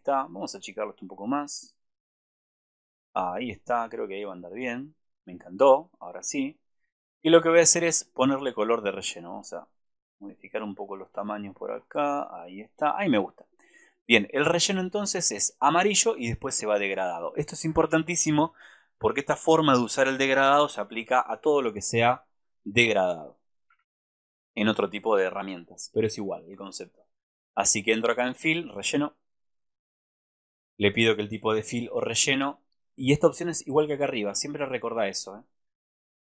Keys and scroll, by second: 23.7 super+=.